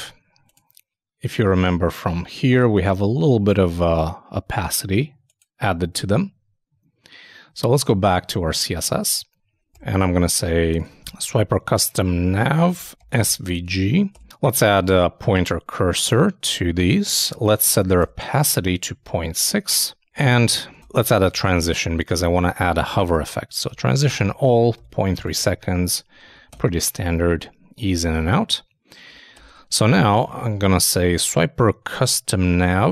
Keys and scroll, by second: 6.1 super+Tab, 13.8 shift+[, 14.1 shift+Return.